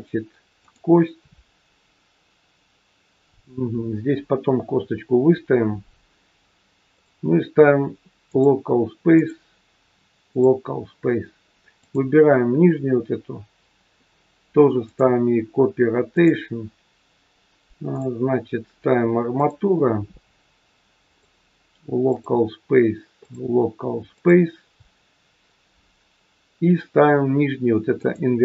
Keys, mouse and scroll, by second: 6.9 click, 9.1 click, 11.7 click, 14.7 click, 21.0 click, 23.3 click, 27.9 click.